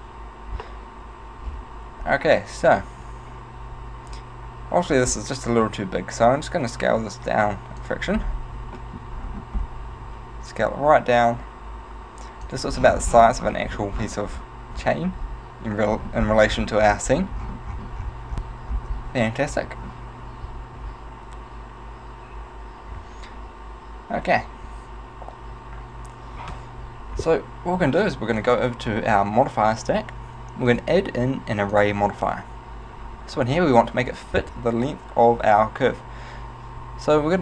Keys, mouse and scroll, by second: 1.6 scroll down 2, 2.1 scroll up 2, 5.7 s, 7.9 click, 8.2-8.8 scroll up 5, 8.8 shift+middle click, 9.2-10.0 scroll up 3, 10.1 s, 12.6 click, 12.8-14.1 scroll down 12, 14.1-14.7 scroll down 7, 15.1-15.6 scroll down 4, 16.1-17.1 scroll up 4, 17.1-18.7 scroll up 16, 18.7 scroll down 1, 19.3 shift+middle click, 28.5 click, 30.7 click.